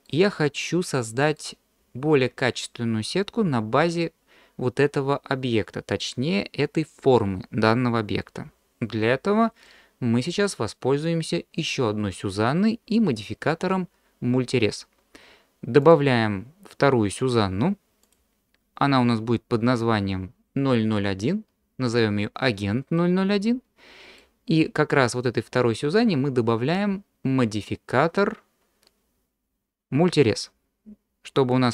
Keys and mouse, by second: 0.7-1.4 middle drag, 9.7-10.3 middle drag, 15.8-18.1 drag, 23.0-24.2 middle drag.